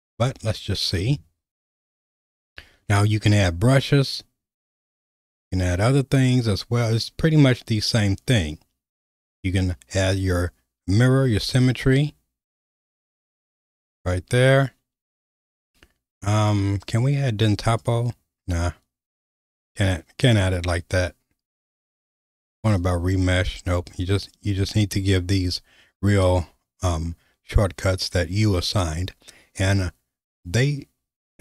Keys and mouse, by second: 11.6-14.2 right drag, 17.8-18.8 right drag, 22.9-27.8 right drag.